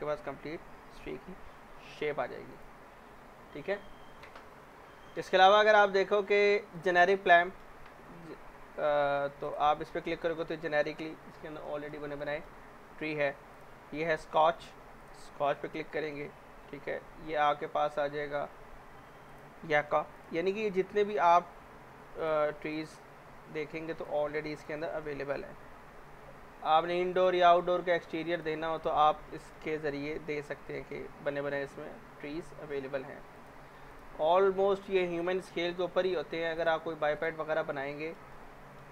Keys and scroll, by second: 30.1 z.